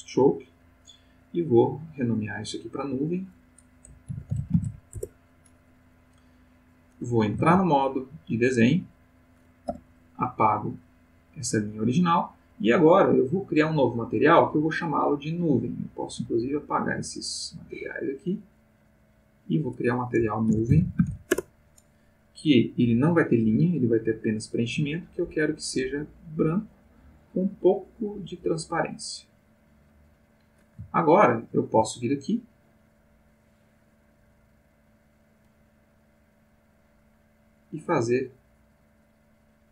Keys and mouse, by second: 1.6 click, 2.5 click, 4.1-4.6 typing, 4.9 shift+Return, 7.3 ctrl+Tab, 8.2 click, 9.7 x, 10.8 click, 13.3 click, 16.7 click, 18.6 click, 19.3 click, 20.5-21.1 typing, 21.3 shift+Return, 23.2 click, 24.1 click, 24.7 click, 25.8 click, 27.3-29.7 drag, 31.0 ctrl+middle click, 34.6 click, 37.9-39.7 drag.